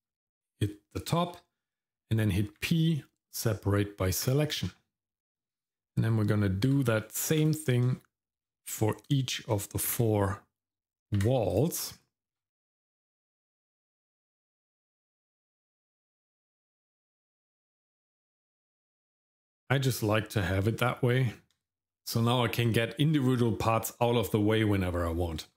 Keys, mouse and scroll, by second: 2.6 p, 5.6 click, 6.7 p, 7.9 shift+middle click, 8.6 middle click, 9.0 click, 9.9 p, 11.2 p, 12.0 shift+middle click, 12.7 middle click, 13.4 click, 14.2 p, 15.0 shift+middle click, 15.6 middle click, 16.2 click, 17.1 p, 17.9 shift+middle click, 18.5 scroll down 2, 18.8 shift+middle click, 19.4 middle click, 19.9-20.7 scroll up 2, 20.7 middle click, 21.2 Tab.